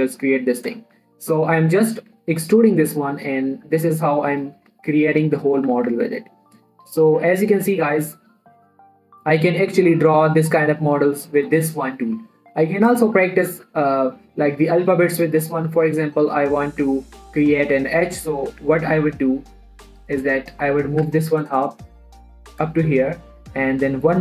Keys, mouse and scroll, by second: 0.5 shift+middle click, 0.7-1.1 shift+scroll up 2, 1.1 e, 1.3 z, 2.1 click, 2.5 s, 3.3 click, 3.5 scroll down 2, 3.6 shift+middle click, 3.7 shift+scroll up 1, 3.8 shift+e, 4.0 z, 4.8 click, 5.1 s, 5.8 click, 6.1 z, 6.3 Tab, 6.4-6.8 scroll down 2, 6.5 middle click, 6.9 shift+middle click, 7.2 middle click, 8.4-8.7 scroll up 2, 8.5 middle click, 12.5 middle click, 13.2 scroll down 1, 13.5 x, 13.6 click, 14.0 shift+a, 16.1 click, 16.3 scroll down 1, 16.4 middle click, 17.0 scroll down 1, 17.2 s, 17.7 click, 18.1-18.4 scroll up 1, 18.4 middle click, 19.0 Tab, 20.4 click, 21.2 scroll down 1, 21.3 middle click, 21.4 g, 21.7 z, 23.0 click, 23.2 shift+middle click, 23.7 e.